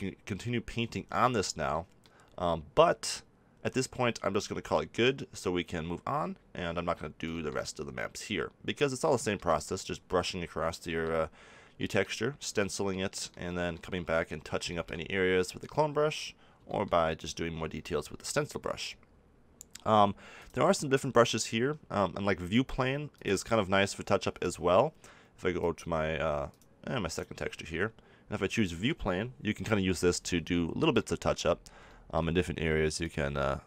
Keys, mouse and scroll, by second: 4.0 middle click, 4.4 middle click, 4.6 middle click, 6.3-7.3 middle drag, 13.4 middle click, 14.8 middle click, 16.8-20.3 middle drag, 20.3-22.3 drag, 24.3-26.2 drag, 26.4-29.8 drag, 29.8 KP_7.